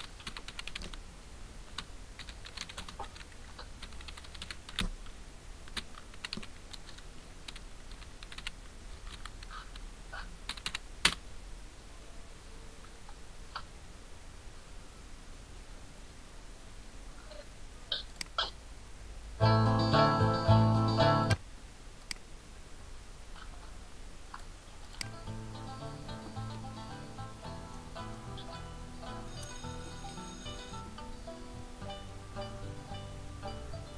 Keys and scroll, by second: 0.0-2.7 typing, 3.8-6.7 typing, 7.9-9.1 typing, 10.4 n, 10.6 e, 11.0 Return.